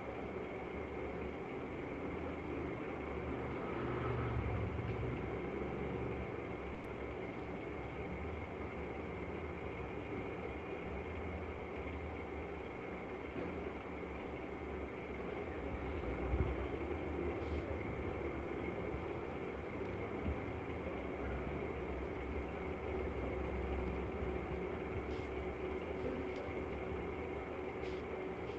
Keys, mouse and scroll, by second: 0.3 click, 2.0 click, 5.2 click, 11.4 click, 12.8 click, 14.2 click, 15.3 click, 17.7 click, 22.2 click, 23.7 click.